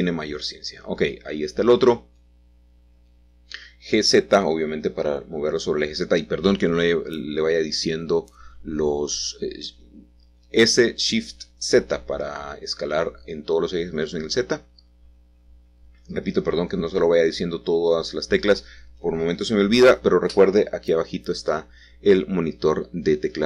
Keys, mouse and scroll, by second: 1.2 r, 3.0 x, 3.7 Return, 5.9 g, 6.6 z, 9.0-10.1 drag, 12.4 s, 13.0 shift+z, 15.0 click, 16.3 g, 16.5 y, 19.0-20.4 shift+middle drag, 20.5-23.4 shift+middle drag.